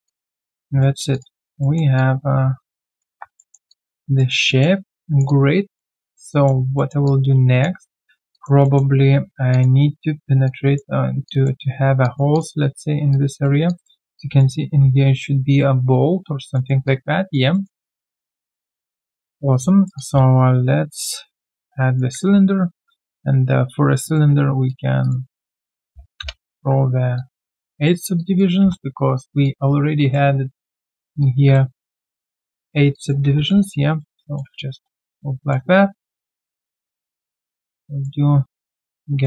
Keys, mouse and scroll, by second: 0.0 alt+click, 0.5 alt+right click, 1.1 alt+click, 1.6 alt+middle click, 1.9 alt+click, 3.3 alt+middle click, 3.7 alt+click, 4.2 alt+middle click, 4.4 alt+click, 5.9 alt+middle click, 6.3 alt+click, 6.7 alt+middle click, 7.0 alt+click, 8.3 alt+click, 8.6 alt+middle click, 9.5 alt+click, 9.8 alt+right click, 11.2 alt+click, 11.6 alt+scroll down 1, 12.0 alt+click, 13.6 alt+click, 14.0 alt+right click, 16.2 alt+scroll down 1, 16.5 alt+middle click, 16.8 alt+click, 17.5 alt+middle click, 17.8 alt+click, 18.7 alt+right click, 19.0 alt+middle click, 19.3-19.6 scroll down 1, 20.4 shift+right click, 21.7 alt+right click, 23.1 ctrl+a, 25.0 double click, 25.9 typing, 26.2 Return, 27.1 alt+click, 27.4 alt+right click, 27.8 alt+middle click, 28.1 alt+click, 30.5 alt+click, 31.7 alt+middle click, 32.0 alt+click, 32.9 alt+click, 33.2 alt+w, 33.2 click, 33.5-34.3 typing, 35.4 alt+middle click, 37.4 alt+right click, 37.7 alt+click.